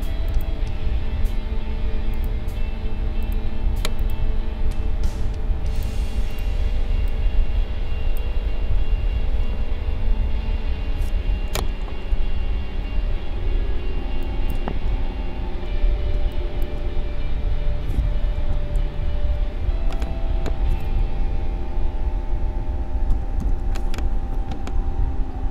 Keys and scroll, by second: 11.6 Right, 12.1 Up, 13.9 space, 16.1 space, 18.3 Up, 23.1 ctrl+c, 24.6 Left.